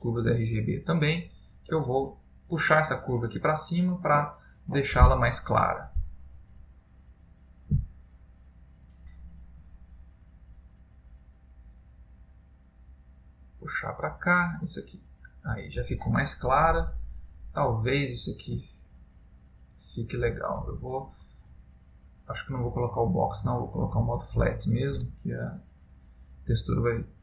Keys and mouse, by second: 9.8 click, 16.8 middle click, 18.9 ctrl+middle click, 23.0 click.